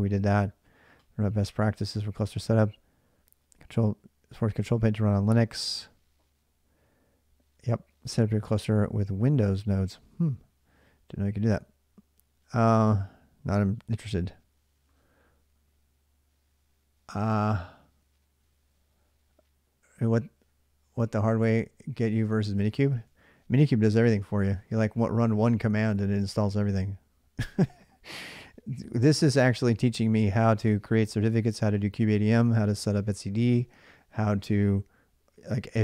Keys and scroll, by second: 29.2 alt+Tab.